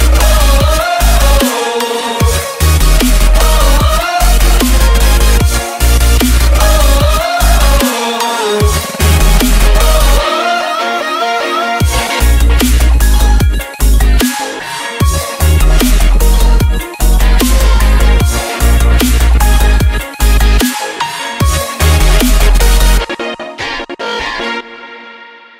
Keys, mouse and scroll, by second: 0.0-0.1 typing, 0.4 Return, 1.0-2.2 right drag, 2.3 click, 5.6 F10, 6.9 click, 8.1-10.9 typing, 12.0 click, 14.0-16.4 typing, 17.0 click, 17.9-19.4 typing, 20.3 click, 21.6 right click, 21.8 click, 21.8 F10, 22.5 click, 24.7-25.5 typing.